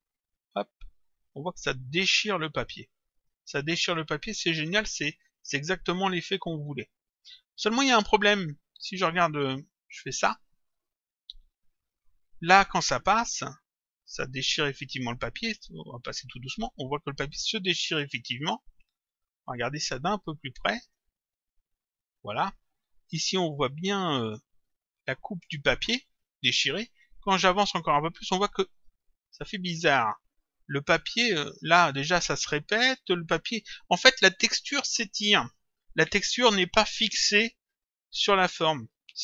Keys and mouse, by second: 0.1 click, 4.4 click, 6.1 click, 8.8 click, 11.4 click, 13.2 click, 19.6 click, 21.5 click, 22.9 click, 24.3 click, 27.5 click, 30.4 click.